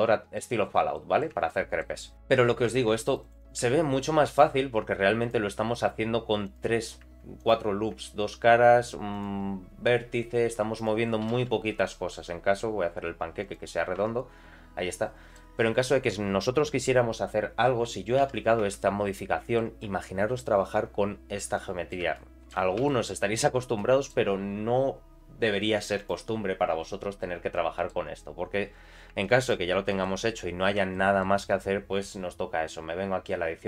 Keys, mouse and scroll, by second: 0.6-0.9 scroll up 2, 0.9 middle click, 1.5 shift+middle click, 2.1 Tab, 2.8 ctrl+r, 3.3 2, 3.4 click, 4.3 shift+click, 5.2 shift+click, 6.4 click, 7.4 click, 9.1 shift+click, 10.7 shift+click, 11.2 g, 13.7 scroll down 2, 14.0 Tab, 14.2-15.3 middle drag, 18.2 ctrl+a, 18.7 Tab, 19.1 middle click, 19.9 scroll up 2, 21.5 middle click, 21.5 scroll up 1, 22.1 shift+middle click, 22.8 3, 23.3 click, 23.7 middle click, 26.0 click, 27.5 middle click, 28.8 scroll down 2, 29.2 shift+middle click, 29.9 alt+middle click, 30.3-30.8 scroll up 2, 30.9 alt+shift+middle click, 31.7-33.5 scroll down 1.